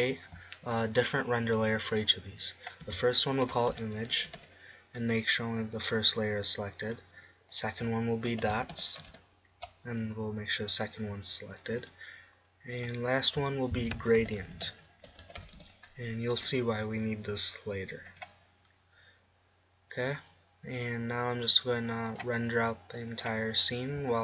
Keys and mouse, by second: 3.6-5.2 drag, 6.9-10.2 drag, 11.8-15.5 drag, 19.2-20.9 drag.